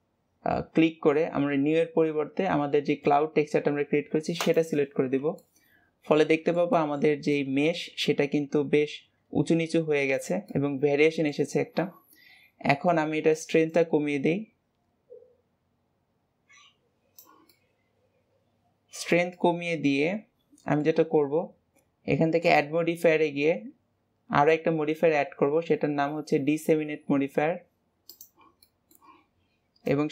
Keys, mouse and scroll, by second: 5.3-7.1 middle drag, 7.1 scroll up 1, 7.3-8.2 middle drag, 8.2 g, 10.5-13.5 middle drag, 13.6-16.7 drag, 17.4-22.3 middle drag, 22.3-25.5 drag, 28.6-29.8 middle drag, 29.8-30.1 drag.